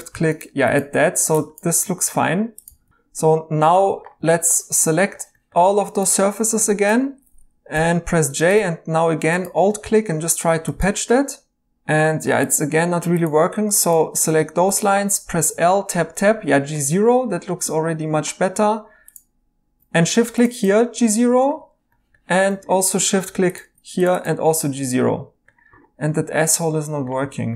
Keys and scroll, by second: 2.2 2, 2.7 x, 2.9 2, 4.1 4, 7.7 j, 8.5 2, 12.0 Escape, 14.6 l, 15.3 Tab, 15.5 Tab.